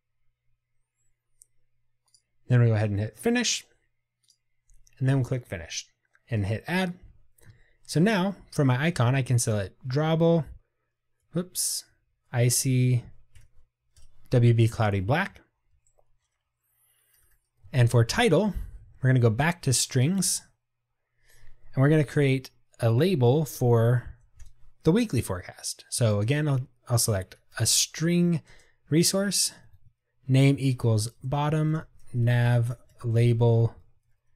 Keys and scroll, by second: 10.0 Tab, 17.7 Return, 17.8 Tab, 23.4 super+z, 29.8 Tab.